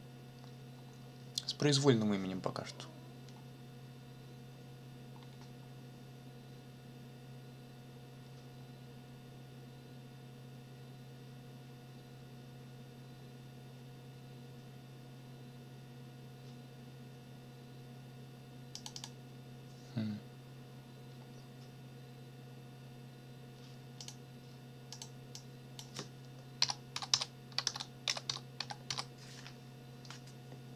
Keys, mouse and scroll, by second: 5.2-5.5 scroll down 2, 18.7 click, 24.0 click, 24.9 click, 25.3 click, 26.4-29.4 typing.